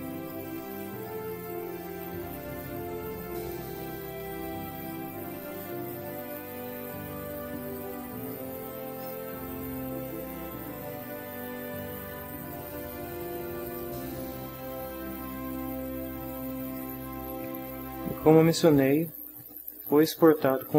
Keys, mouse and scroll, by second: 0.3 click, 1.3 shift+middle click, 2.6 click, 3.8-5.1 drag, 5.6 click, 6.9-8.5 drag, 13.7 click, 15.3 click, 16.6 click.